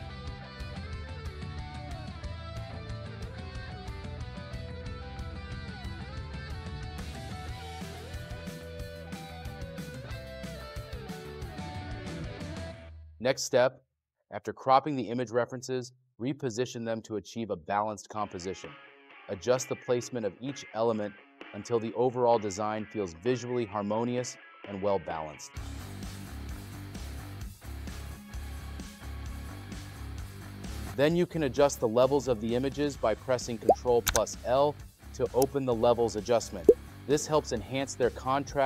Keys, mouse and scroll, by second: 0.0-1.7 typing, 2.8-4.9 typing, 6.2-8.5 typing, 9.7 space, 10.4 space, 11.1 space.